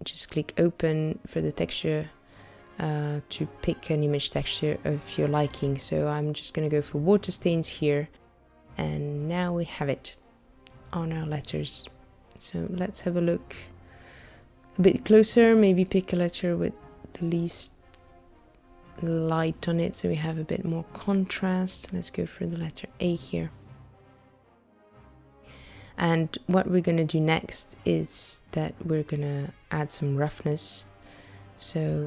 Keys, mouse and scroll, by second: 8.9 middle click, 13.6 click, 14.6-15.7 scroll down 5, 16.7-17.3 scroll up 1, 17.3 scroll up 2, 17.4 scroll down 2, 19.4 shift+middle click, 20.3-20.7 scroll up 3, 20.9 shift+middle click, 22.5 click, 26.7 middle click, 28.0 middle click, 28.9 click, 29.7 shift+a.